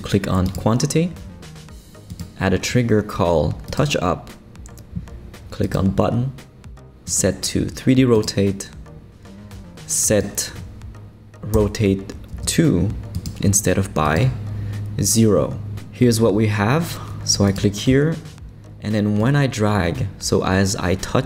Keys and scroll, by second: 11.5 0, 12.3 Return.